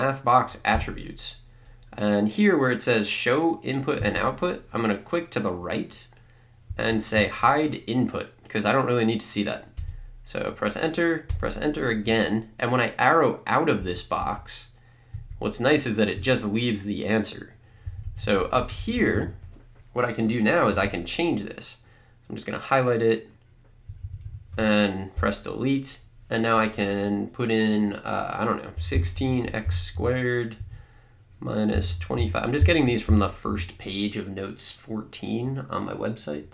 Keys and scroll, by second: 0.8 Return, 13.8 Up, 17.9 Right, 25.1 BackSpace, 28.5-29.9 typing, 30.6 Right, 31.5-34.0 typing.